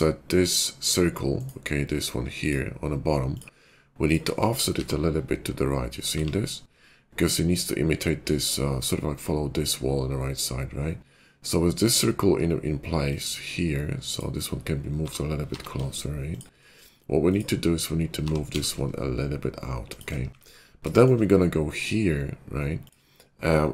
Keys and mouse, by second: 3.2 click, 3.9 shift+click, 4.7 g, 14.9 g, 16.5-21.3 middle drag, 18.2 g, 20.3 `, 22.7 click.